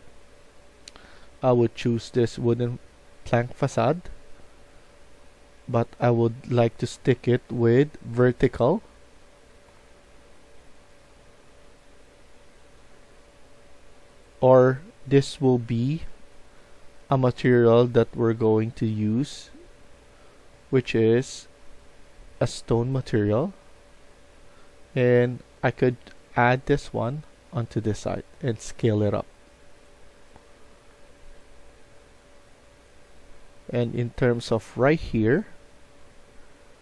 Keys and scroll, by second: 0.6-1.3 typing, 3.0 a, 6.8-9.7 typing, 30.0-31.1 typing.